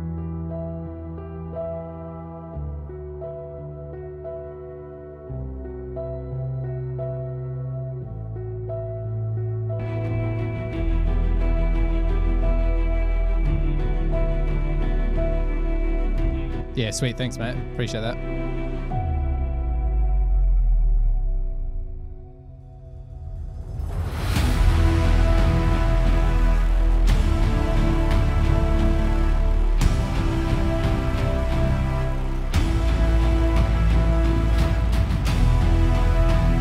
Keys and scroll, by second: 3.4 super+=, 4.9 super+[, 5.1 super+[, 5.6 super+[, 27.5 F8.